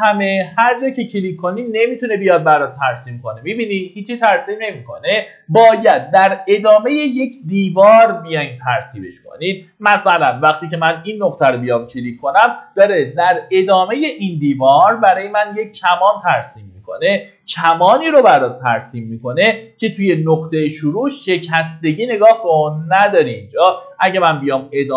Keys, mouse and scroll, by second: 0.1 click, 1.5 middle click, 2.3 click, 6.4 middle click, 9.1-10.0 scroll up 1, 11.0 click.